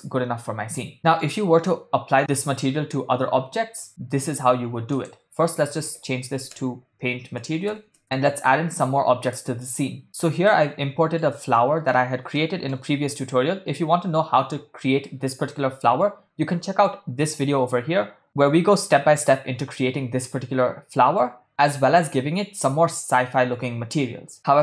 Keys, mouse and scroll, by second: 0.9 ctrl+middle click, 2.4 ctrl+middle click, 4.9-8.0 drag, 8.0 ctrl+middle click, 10.0 shift+middle click, 10.5-11.2 middle drag, 11.6-11.9 ctrl+middle drag, 12.4-12.8 shift+middle drag.